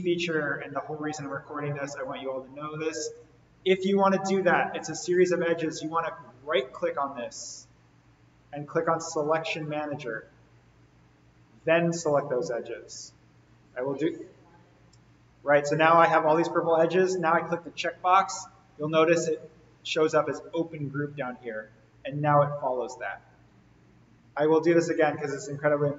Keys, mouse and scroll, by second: 6.7 right click, 9.4 click, 13.2 click, 17.4 click, 25.4 right click.